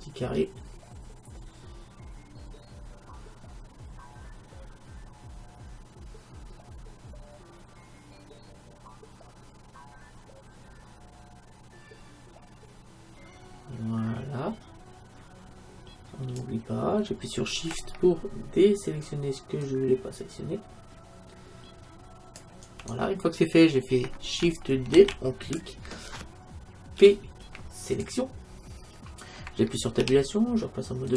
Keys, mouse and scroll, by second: 25.0 shift+d, 25.6-27.4 drag, 27.0 p, 28.8-31.1 middle drag, 30.0 Tab.